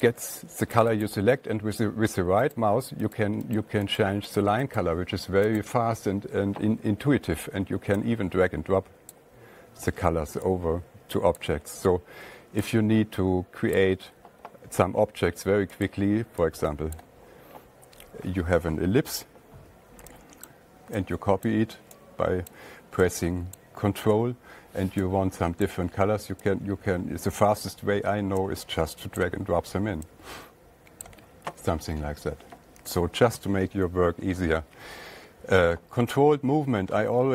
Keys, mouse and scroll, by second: 0.1 click, 0.4 click, 1.2 click, 1.5 click, 3.0 right click, 3.6 right click, 4.4 right click, 4.8 right click, 5.1 right click, 5.2 click, 6.0 click, 9.5 click, 11.8 click, 16.3 click, 20.9 ctrl+click, 21.9 click, 23.0 click, 24.0 click, 24.6 ctrl+click, 26.1 click, 28.1 click, 33.8 alt+Tab.